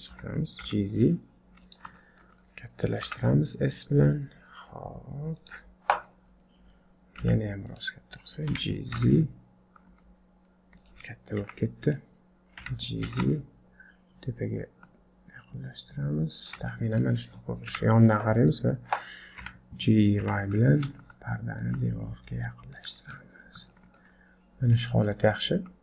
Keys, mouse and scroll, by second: 0.1 g, 2.0 shift+middle click, 2.5-3.1 scroll down 2, 3.1 s, 6.3-7.2 scroll up 2, 7.2 s, 8.5 g, 11.4 s, 12.6 g, 16.7 middle click, 17.7 KP_3, 18.6 scroll down 5, 19.4 g, 23.1-23.7 scroll up 7, 23.7 shift+middle click, 24.5-25.0 scroll down 5, 24.8 middle click, 25.3 scroll up 2, 25.6 z.